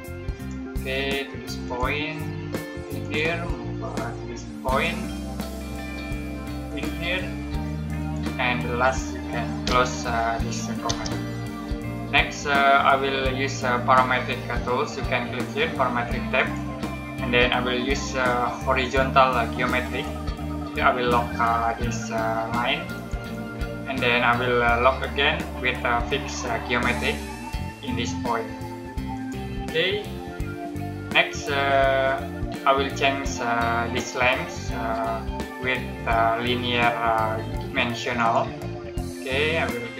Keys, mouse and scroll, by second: 9.5 c, 10.8 space, 11.5 middle click, 12.2-13.0 scroll up 1, 13.0 middle click, 16.3 click, 19.8 click, 22.9 click, 26.7 click, 30.3 middle click, 38.1 click.